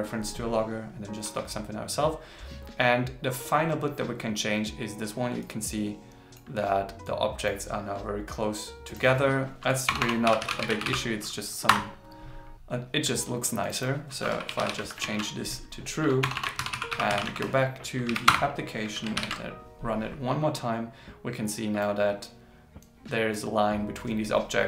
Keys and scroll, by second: 14.9 super+s, 19.1 ctrl+shift+r.